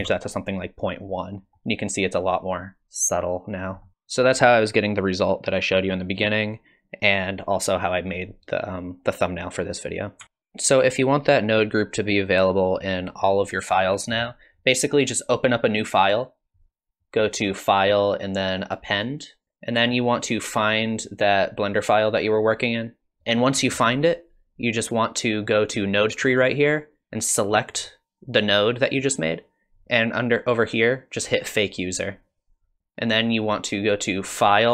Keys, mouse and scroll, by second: 1.4 scroll up 2, 3.8 middle click.